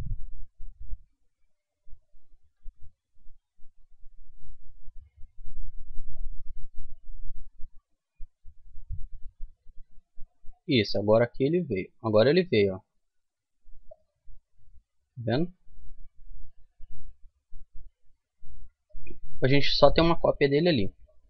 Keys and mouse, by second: 1.4 Tab, 2.5 m, 11.7-13.5 drag, 13.9-15.7 drag, 15.5 Tab, 16.5-18.3 right drag, 17.1 Tab, 18.3-21.2 middle drag.